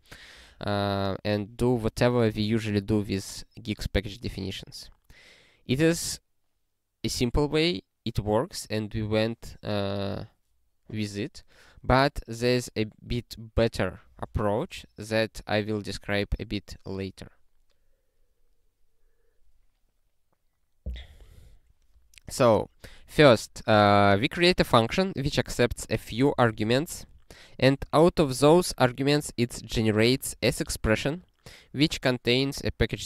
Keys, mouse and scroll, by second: 4.1 scroll down 1, 22.9 click, 23.7 ctrl+n, 25.4 click, 26.3 ctrl+a, 26.5 ctrl+space, 27.6 ctrl+g, 28.7 scroll down 1, 29.7 click, 30.0 ctrl+a, 30.4 ctrl+alt+@.